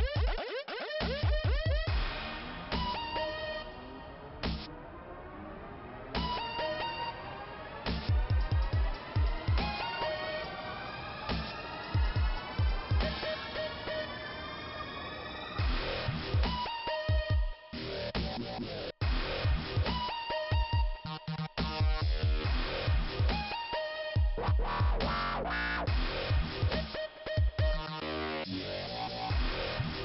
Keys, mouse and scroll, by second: 1.5 click, 3.8 click, 6.5 click, 9.5 click, 11.1 click, 11.2 click, 11.6 click, 11.6 double click, 12.3 double click, 12.4 double click, 12.5 double click, 12.8 double click, 13.0 double click, 13.1 click, 14.4 click, 14.5 click, 15.2-15.6 scroll up 1, 16.1 click, 17.4 click, 17.5 click, 18.5 click, 18.6 click, 19.5 click, 21.7 click, 21.7 click, 23.3 click, 23.4 click, 24.1 click, 24.2 click, 24.2 click.